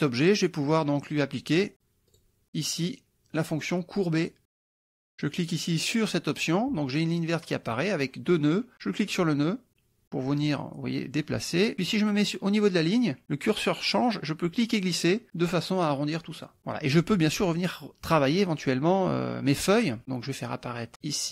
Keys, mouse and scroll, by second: 0.8 click, 2.1 click, 5.0 click, 6.4 click, 8.7-10.0 drag, 11.6 click, 14.6-16.6 drag.